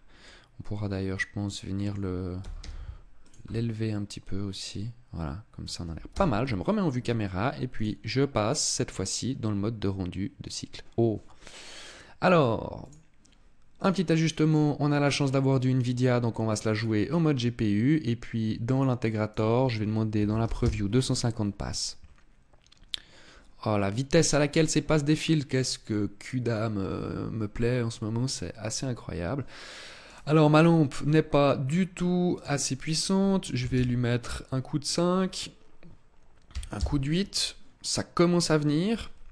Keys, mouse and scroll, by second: 0.0 middle click, 2.2 g, 3.1 click, 3.2 middle click, 5.8 KP_0, 7.6 click, 12.6 click, 13.5 click, 16.4-18.4 scroll down 7, 18.4 click, 18.4 scroll down 2, 19.0 click, 28.4 click, 29.8 right click, 30.8-31.8 scroll up 8, 32.0 click, 32.6 click, 34.6 click.